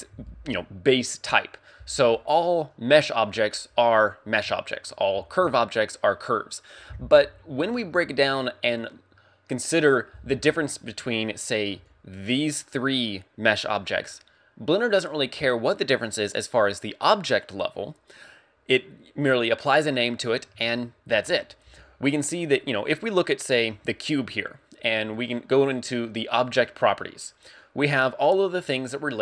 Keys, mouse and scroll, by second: 11.8 d, 11.8 click.